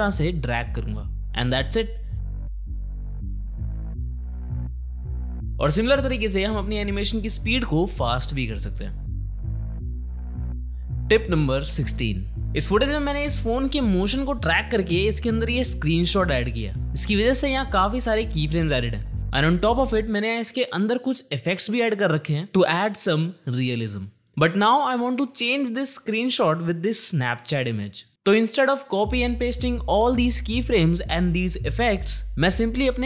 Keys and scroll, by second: 1.8 Home, 1.9 space, 5.5 space, 8.9 space, 12.4 space, 14.3 space, 17.8 u.